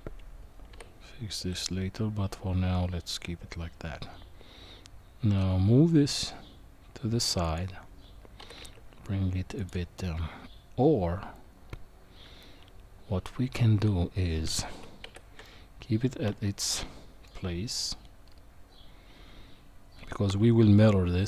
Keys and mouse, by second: 0.7 g, 8.4 g, 10.0-14.4 middle drag, 14.7 ctrl+z, 15.0 ctrl+z, 15.4-17.3 middle drag, 20.3 KP_1.